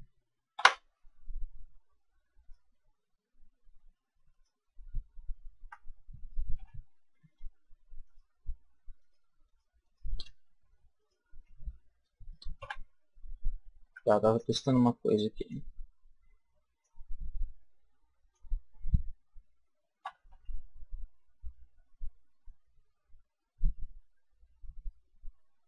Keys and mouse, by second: 0.4 a, 2.3-6.0 right drag, 2.3 q, 6.4 a, 7.9-12.6 right drag, 12.4 a, 13.7 b, 16.7-18.4 drag, 19.9 s.